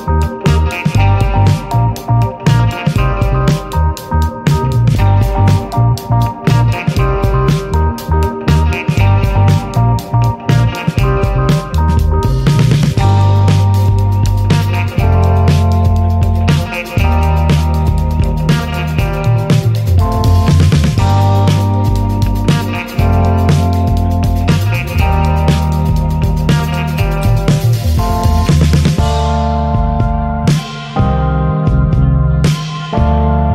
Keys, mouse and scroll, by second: 0.2 shift+middle drag, 0.4 scroll up 2, 0.6-2.4 middle drag, 2.4-3.5 drag, 3.5 alt+middle click, 3.8 alt+middle click, 4.3 click, 4.6 scroll down 1, 4.8 /, 5.5 drag, 5.9 alt+middle click, 6.1 alt+middle click, 7.1 click, 8.4 alt+middle click, 9.4 click, 11.5 shift+d, 13.5-14.0 middle drag, 14.0 ctrl+s, 14.2-14.8 middle drag, 14.8 /, 15.3-16.7 middle drag, 16.7 click, 17.4-18.8 middle drag, 18.8 click, 19.5-20.5 middle drag, 20.5 click, 20.9-23.0 middle drag, 23.0 click, 23.4 middle click, 24.4 click, 24.9-26.5 middle drag, 26.5 click, 27.1-28.1 middle drag, 28.7 scroll up 2, 29.6 click, 30.1-30.6 middle drag, 30.6 scroll down 2, 30.9-32.9 middle drag, 32.9-33.5 drag.